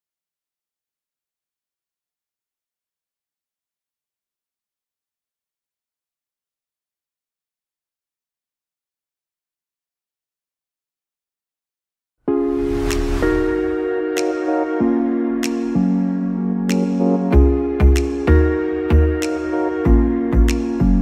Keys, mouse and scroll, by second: 5.1 middle click, 5.1 scroll down 8, 5.8 shift+middle click, 5.8 scroll down 1.